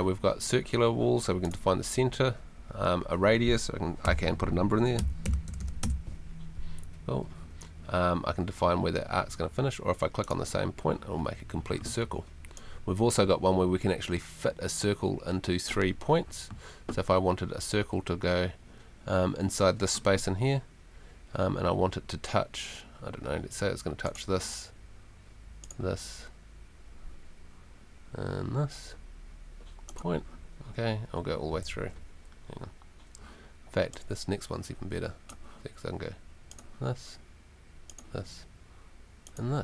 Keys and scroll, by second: 4.0 r, 5.0 3, 5.5 0, 5.8 Return, 31.7 Escape.